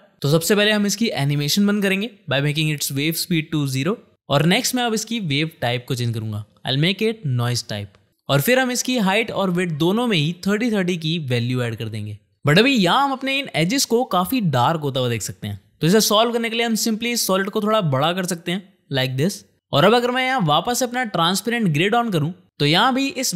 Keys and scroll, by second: 3.5 0, 3.8 Return, 10.1 3, 10.6 Tab, 11.7 Return, 13.2 space, 15.9 shift+/.